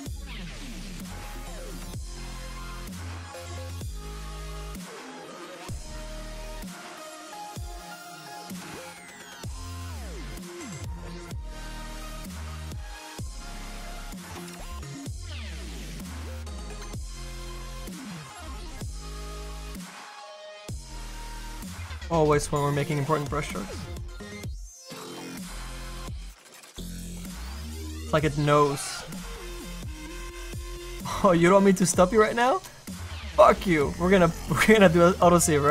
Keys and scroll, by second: 14.9 s, 26.0 s.